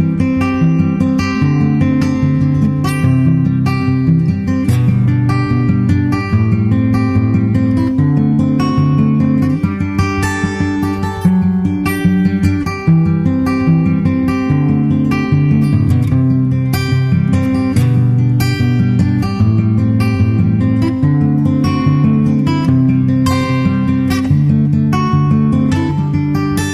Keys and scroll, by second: 3.4 super+s, 8.7 super+c, 22.4 super+Right, 22.7 super+s, 26.3 super+Tab.